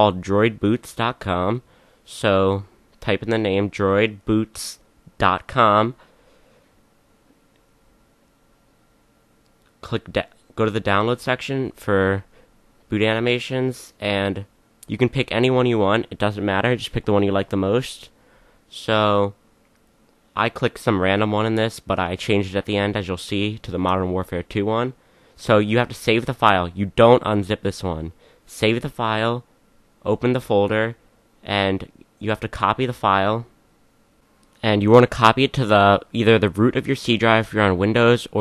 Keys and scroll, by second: 2.8-7.1 typing.